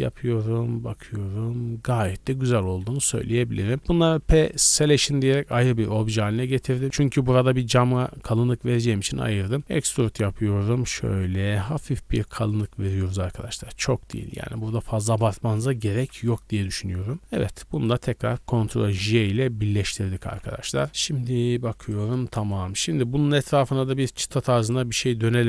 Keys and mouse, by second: 4.0 p, 4.8 Tab, 4.8 click, 5.1 middle click, 5.2 click, 6.0 KP_7, 6.4 Tab, 6.7 z, 6.8 a, 7.4-12.6 drag, 9.7 e, 12.6-14.5 middle drag, 13.4 z, 14.5 click, 14.9 shift+middle click, 15.1 click, 15.3 Tab, 15.7 a, 15.9 a, 16.5-17.1 middle drag, 17.2-19.6 shift+drag, 19.0 ctrl+j, 19.6 middle click, 19.7-22.5 drag, 20.0 a, 20.2 a, 21.1 g, 22.5-24.2 middle drag, 24.2-24.7 drag, 24.7 Tab, 24.7 middle click, 25.3 2.